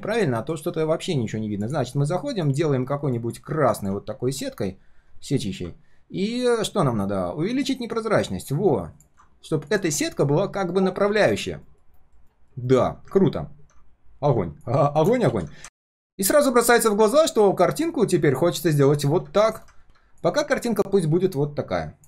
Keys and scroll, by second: 10.6 ctrl+shift+4, 11.0 ctrl+shift+4, 11.5 ctrl+shift+4, 11.8 ctrl+shift+4, 15.3 ctrl+s.